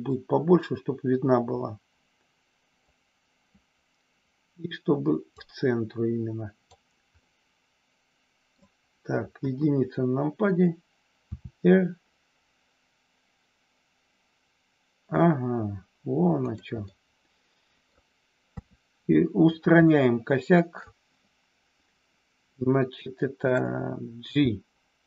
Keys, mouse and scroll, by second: 0.1-2.8 drag, 5.3-6.7 drag, 7.2 scroll up 1, 7.3-8.6 middle drag, 9.4 KP_1, 11.3 r, 16.4 click, 16.8-17.8 middle drag, 18.6 KP_3, 19.8-20.8 shift+middle drag, 23.4 click, 24.3 g.